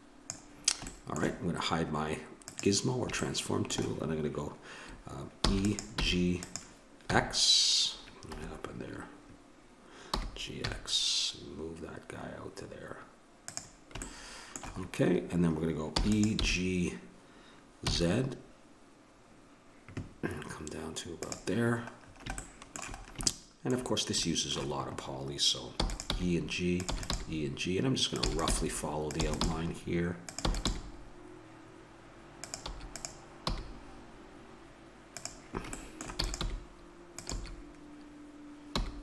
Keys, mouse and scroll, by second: 2.4 click, 3.2-4.2 middle drag, 5.4 e, 6.0 g, 7.1 x, 10.1 g, 14.0-15.9 middle drag, 15.9 e, 16.4 g, 22.0 middle click, 25.7 e, 26.1 g, 26.9 e, 27.1 g, 28.3-30.7 typing, 32.7 e, 33.5 g, 35.7 middle click, 36.2 e, 36.4 g, 37.3 e.